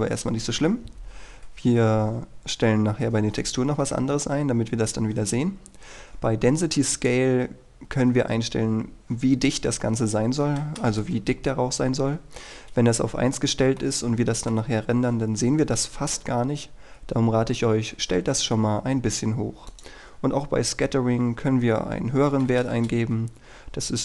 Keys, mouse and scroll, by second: 7.1 click, 10.5 KP_4, 10.9 Return, 13.5-13.9 scroll up 1, 13.9 middle click, 19.8 click, 22.4 KP_4, 22.8 Return.